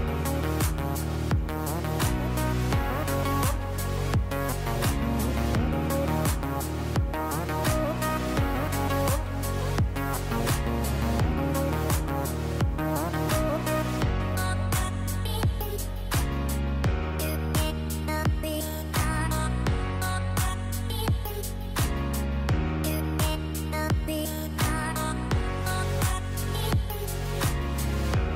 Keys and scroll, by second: 0.3 shift+Down, 1.6 shift+Up, 2.1 shift+Up, 24.2 p.